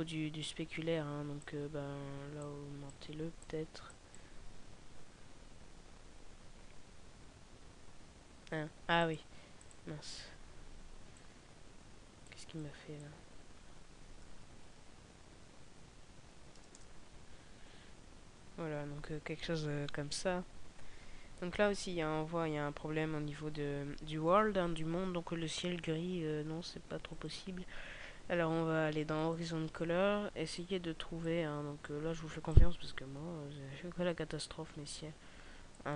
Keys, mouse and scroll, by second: 1.2 click.